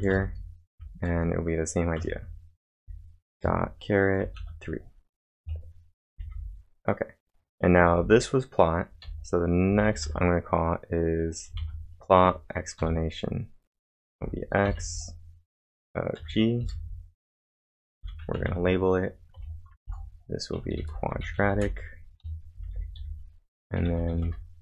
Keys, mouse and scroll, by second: 0.0-2.0 typing, 3.4 shift+6, 4.2 space, 4.4 3, 5.9-6.6 typing, 7.8 j, 9.5-10.5 typing, 11.6 shift+1, 12.8 shift+9, 14.2 x, 14.8 space, 16.2-19.8 typing, 21.0-24.6 typing.